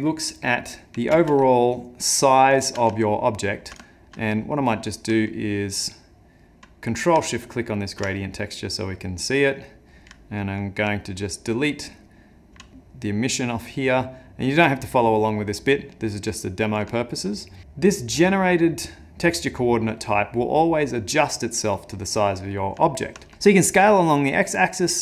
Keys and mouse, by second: 1.2 ctrl+space, 2.1 middle click, 2.6 shift+middle click, 3.0 ctrl+middle click, 3.8 shift+middle click, 4.5 middle click, 5.9 middle click, 7.7 ctrl+shift+click, 9.7 middle click, 11.2 ctrl+right click, 14.7 click, 15.8 middle click, 16.9 shift+middle click, 17.3 middle click, 22.2 middle click.